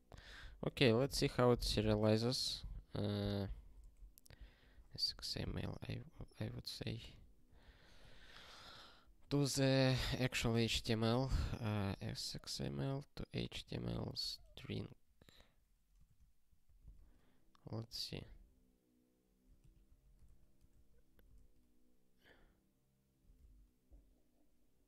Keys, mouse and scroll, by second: 2.3 click, 2.8 ctrl+p, 3.2 ctrl+n, 3.6 alt+b, 3.8 alt+d, 4.0-5.2 typing, 6.7 click, 7.1-8.3 typing, 8.4 ctrl+n, 8.5 ctrl+n, 10.0 ctrl+a, 10.5-15.0 typing, 12.8 Return, 16.0 alt+s, 16.6 ctrl+e, 19.6 ctrl+g, 20.2 ctrl+e, 20.7 ctrl+n, 21.1 ctrl+e, 23.4 ctrl+p.